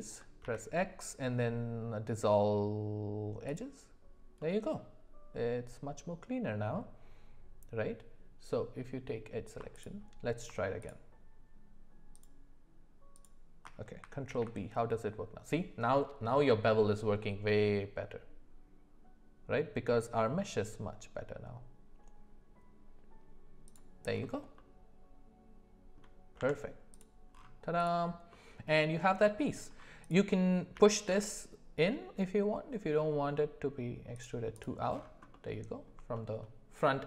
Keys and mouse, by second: 0.4 x, 4.4-7.8 middle drag, 9.7 alt+click, 10.8 alt+shift+click, 13.1 alt+shift+click, 14.3 ctrl+b, 24.6-26.0 middle drag, 26.4 Tab, 27.8 click, 28.3-29.5 middle drag, 30.0 click, 30.8 g, 35.3-35.9 middle drag, 36.1 shift+middle drag.